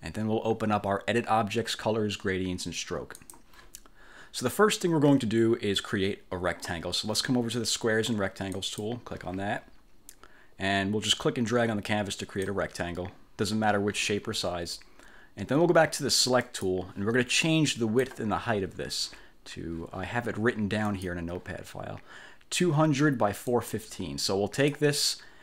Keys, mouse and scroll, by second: 3.3 click, 8.7 click, 11.2-12.7 drag, 16.5 click, 17.5 click, 21.0 click, 23.6 click, 24.3 click.